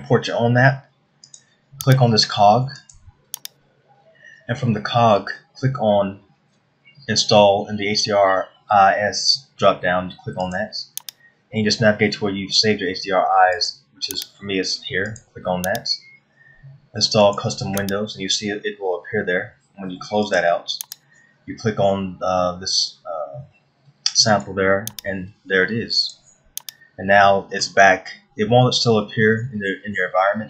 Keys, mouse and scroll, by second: 27.5-27.9 scroll down 2, 27.9 middle click, 28.6 scroll up 2, 29.3-29.9 scroll down 2.